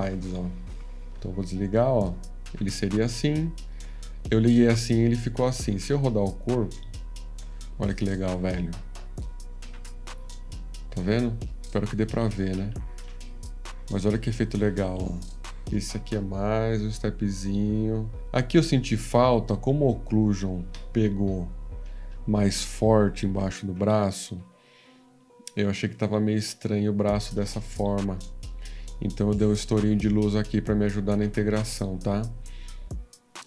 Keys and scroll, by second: 21.4 F13, 23.3 ctrl+=.